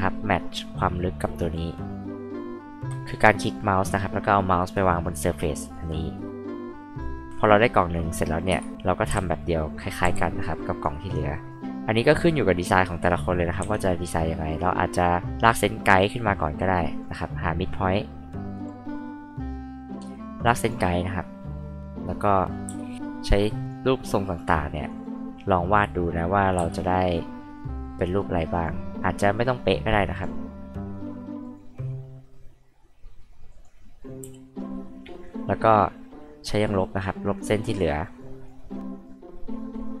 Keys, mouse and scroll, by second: 2.0 click, 2.8 ctrl+z, 3.4-5.7 drag, 6.2 click, 7.3 click, 8.8-10.0 typing, 10.4 click, 11.1 click, 12.1 click, 13.6 l, 16.9 click, 18.6 click, 20.6 click, 22.7 c, 23.6 click, 24.8 click, 26.5 r, 28.5 click, 30.1 click, 31.4 click, 33.5 click, 35.3-36.7 drag, 37.0 click, 38.2 click, 38.7 click, 39.7-40.0 drag.